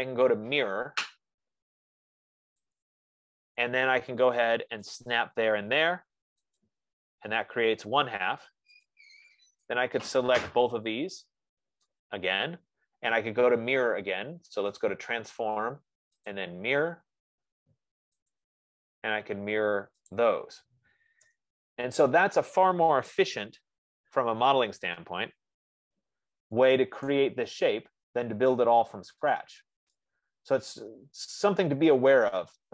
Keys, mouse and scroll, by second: 3.2 click, 5.5 click, 7.0 click, 9.2 click, 12.4 click, 15.4 click, 16.7 click, 18.7 click, 20.7 click, 21.6 Return, 23.5 Return, 24.6 scroll, 25.8 Escape, 26.7 middle click, 27.9 right click, 28.5 middle click, 28.7 middle click, 28.9 middle click, 31.5 right click, 31.5 scroll.